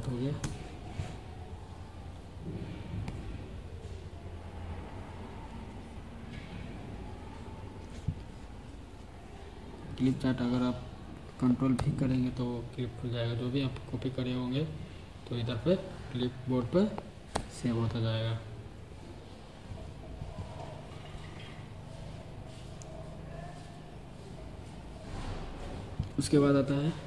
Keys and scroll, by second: 0.0-0.3 typing, 11.6 super+v, 14.5 ctrl+v, 17.2 super+v.